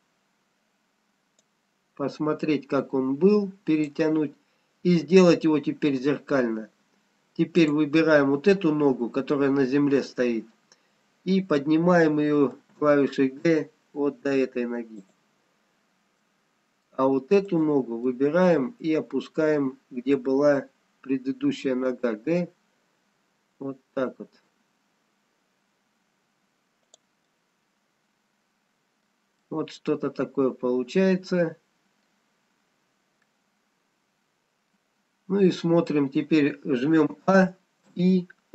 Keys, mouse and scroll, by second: 1.8 click, 5.1-5.9 scroll up 1, 7.7 click, 12.8 g, 16.2 middle click, 18.0 click, 18.5 middle click, 22.2 g, 27.4 middle click, 29.5 middle click, 32.7-33.3 scroll down 2, 33.3 middle click, 37.3 a, 37.9 i.